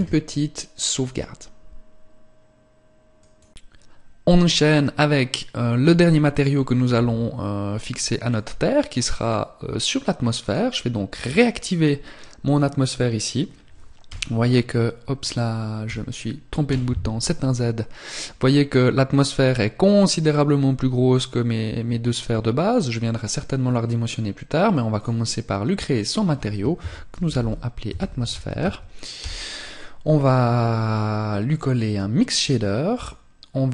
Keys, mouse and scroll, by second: 7.9 click, 10.0 click, 13.6 t, 15.4 t, 16.2 z, 24.5 click, 31.0 click, 33.6 click.